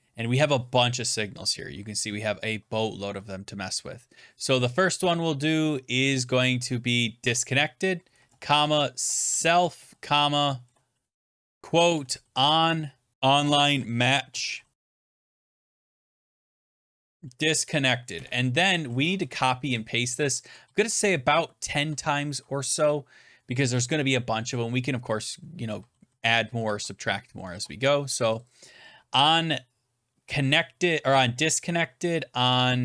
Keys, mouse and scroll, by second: 1.3-3.9 scroll, 2.8 Tab, 7.1 Tab, 7.2 click, 8.1-10.1 typing, 11.2-18.1 typing, 14.7 click, 19.1 ctrl+z, 20.2 ctrl+c, 20.5 ctrl+v, 20.7 ctrl+v, 21.0 ctrl+v, 21.2 ctrl+v, 21.5 Return, 21.5 ctrl+v, 21.7 ctrl+v, 25.7 ctrl+v, 25.9 ctrl+v, 26.5 ctrl+v, 27.4 ctrl+v, 28.3 click, 28.4 click.